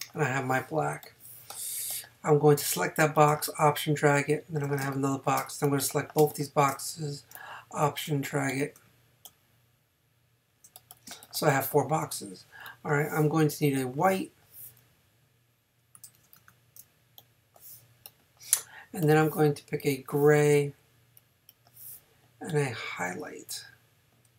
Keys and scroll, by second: 6.2 space.